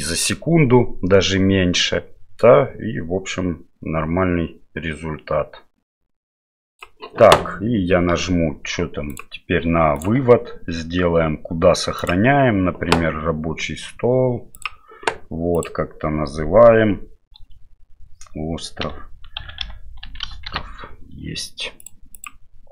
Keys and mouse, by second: 9.1 click, 12.0 click.